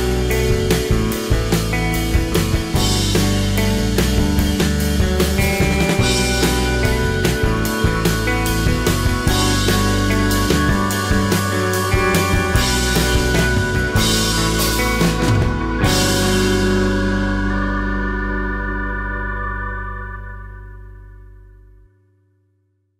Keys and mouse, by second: 1.6-7.7 drag, 7.7-10.2 middle drag, 10.2-12.2 drag, 12.2-14.2 middle drag, 14.6-16.7 drag, 15.9 g, 16.1 f, 16.6 f, 17.2-19.4 drag, 20.0 click, 22.0-22.8 drag, 22.8 middle click.